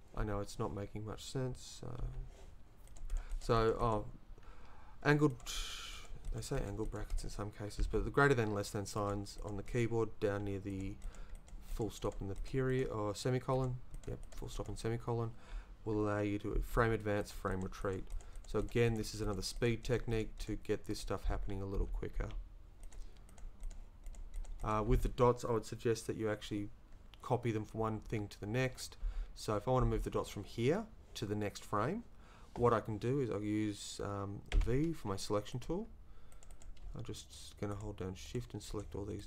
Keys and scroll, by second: 34.5 v.